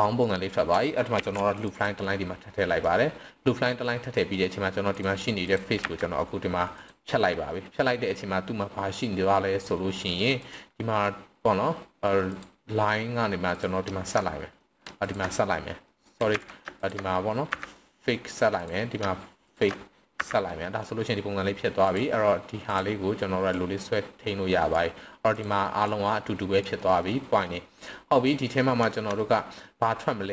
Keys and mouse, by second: 1.1 ctrl+r, 2.0-2.8 middle drag, 4.8 click, 5.8 x, 7.5 middle click, 8.6-9.0 middle drag, 9.4 middle click, 10.3 click, 12.3 click, 13.5 click, 14.2-14.6 middle drag, 15.0 shift+click, 15.8 middle click, 16.3 ctrl+z, 16.7 shift+click, 17.3 f, 17.7 middle drag, 18.5 click, 19.4 shift+click, 20.1 f, 20.4 middle click, 21.8 click, 23.6-24.7 drag, 25.3 click, 25.9-26.6 drag, 27.0-27.4 middle drag, 27.9-28.5 middle drag, 28.9 shift+middle drag, 29.2-29.6 middle drag.